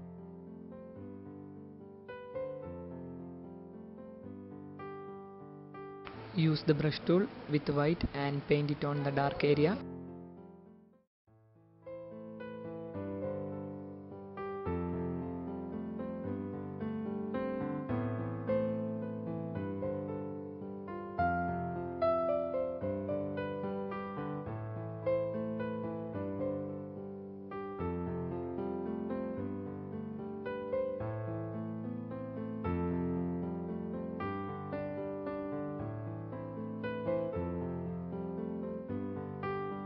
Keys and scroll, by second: 1.0 space, 1.7 f, 5.4 b, 6.9 ], 10.5-11.2 typing, 15.3-15.7 typing, 17.4-18.5 typing, 19.5 ctrl+z, 20.5 ctrl+z, 23.3-24.4 typing, 25.9 ctrl+z, 30.0 space, 31.5-33.6 typing, 35.3-37.5 typing.